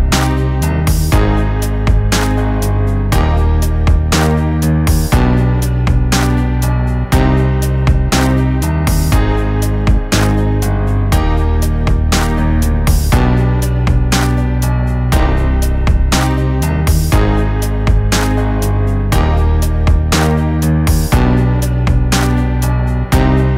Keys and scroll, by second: 8.6 ctrl+-, 9.0 ctrl+-, 13.0 v, 13.8 ctrl+-, 15.2 ctrl+=.